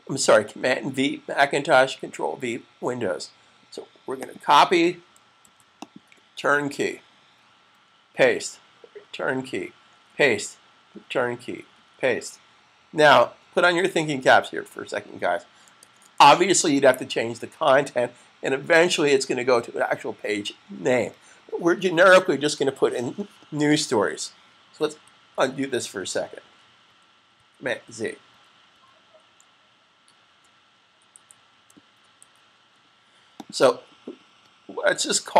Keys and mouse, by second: 4.1 click, 5.2 super+c, 5.7 click, 7.7 click, 15.5 super+s, 31.1 super+z, 31.9 shift+super+z, 33.2 click, 33.2 typing.